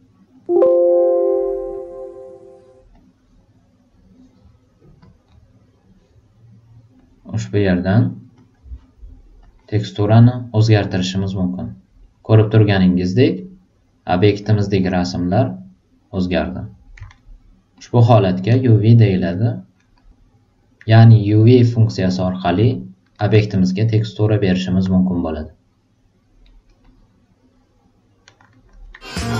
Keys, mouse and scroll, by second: 1.7 click, 2.9 click, 5.0 click, 7.0 click, 8.3 super+click, 9.4 click, 12.1 click, 14.1-15.6 drag, 17.1 alt+right click, 17.7-18.9 alt+drag, 19.1 alt+right click, 19.8 alt+middle click, 23.1 alt+right click, 23.5 alt+middle click, 23.8 alt+right click, 24.3-25.6 alt+drag, 26.4 alt+super+right click, 26.8-28.3 alt+super+drag.